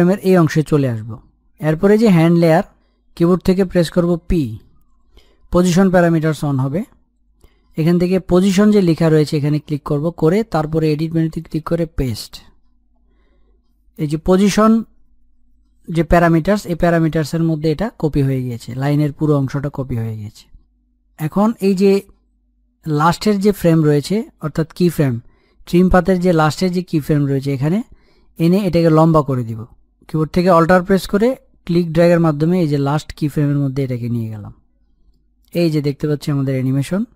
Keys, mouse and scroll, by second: 3.4 click, 6.0 p, 7.8 scroll down 1, 8.4-10.2 scroll up 1, 10.4 click, 10.5 click, 21.9 scroll down 1, 22.9-24.6 scroll down 1, 24.6-28.2 drag, 28.6-30.5 scroll up 1, 32.2 alt+Num_Lock, 32.2-32.7 scroll up 1, 32.9-36.8 alt+drag, 36.8-37.1 middle drag.